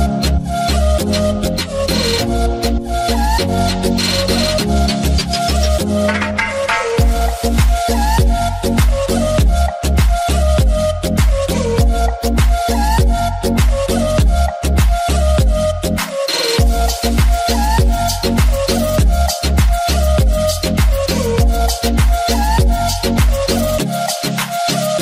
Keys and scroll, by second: 0.0-0.4 typing, 0.7 Return, 5.3-6.0 typing, 10.3-11.8 typing, 12.1 Return.